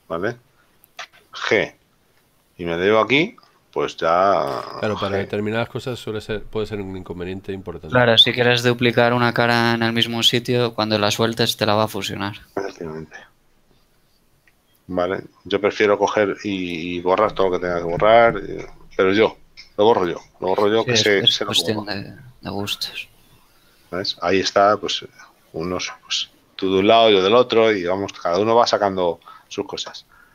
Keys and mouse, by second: 1.2 g, 3.2 ctrl+click, 5.2 g, 9.2 click, 10.2 ctrl+z, 28.6 Tab.